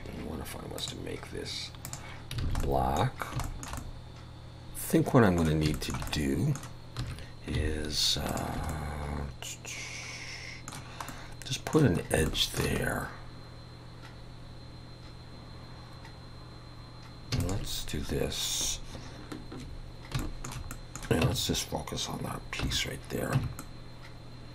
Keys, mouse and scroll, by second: 0.8 click, 2.4 alt+a, 2.6 middle click, 3.1-3.4 scroll down 2, 3.4 shift+middle click, 3.8 middle click, 4.6 ctrl+KP_Add, 4.6 alt+a, 4.6 middle click, 4.6 scroll down 1, 5.7 shift+middle click, 6.1 middle click, 7.0 2, 8.3 alt+shift+click, 8.7 middle click, 11.1 middle click, 12.0 scroll up 2, 12.3 shift+middle click, 12.8-14.1 scroll up 1, 14.1-15.0 scroll up 1, 17.4 alt+shift+click, 19.9-20.2 scroll down 2, 20.2 shift+middle click, 20.7 middle click, 21.3 Tab, 22.6 /, 23.4 Tab, 23.6 middle click.